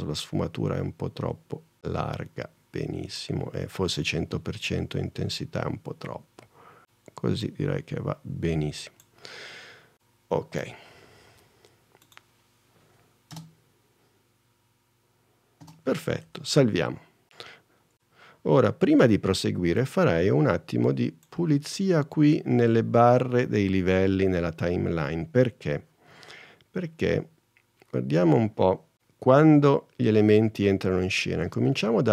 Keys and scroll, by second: 13.5 space, 15.8 space, 16.4 super+s, 18.5 super+s.